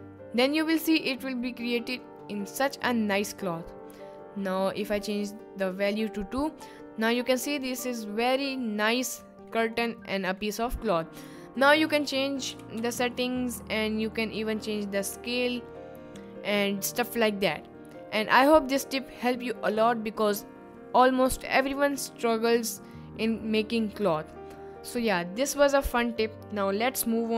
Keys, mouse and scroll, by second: 5.1 click, 6.6 middle click, 8.5 middle click, 9.7 middle click, 10.3 middle click, 12.1 middle click, 12.6 s, 12.8 y, 15.0 click.